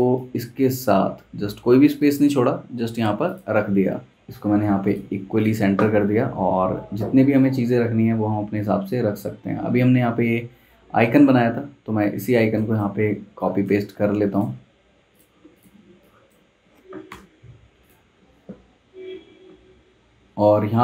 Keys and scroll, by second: 13.1 z, 14.0 v, 17.1 BackSpace.